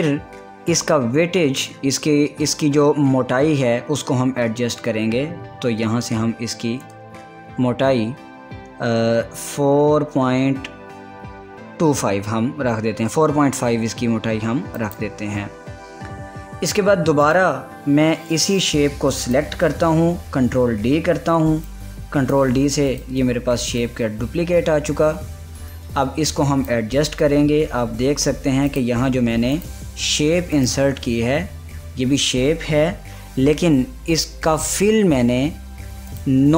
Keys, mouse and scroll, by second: 0.4 click, 15.4 click, 16.4 scroll down 1, 17.9 click, 21.2 ctrl+d, 22.4-29.3 drag, 30.4 click.